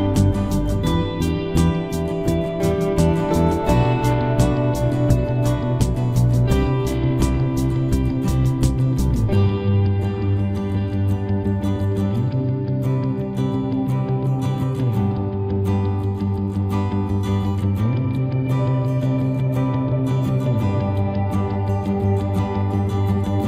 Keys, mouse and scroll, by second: 3.2 x, 3.8 x, 5.7 Tab, 6.2 z, 7.4 Tab, 7.9 ctrl+z, 8.2 ctrl+z, 9.3 Tab, 10.1 Tab, 10.4 Tab, 11.0 z, 15.6 Tab, 17.0 right click, 17.4 c.